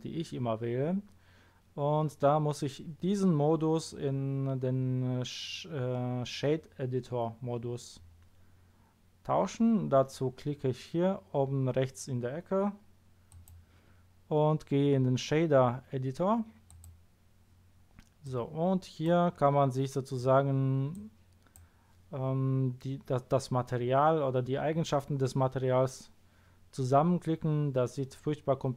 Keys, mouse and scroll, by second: 13.3 click, 16.7 click, 18.2 click, 19.3 scroll up 1, 20.1 scroll up 1, 20.3 middle click, 20.9-21.5 drag.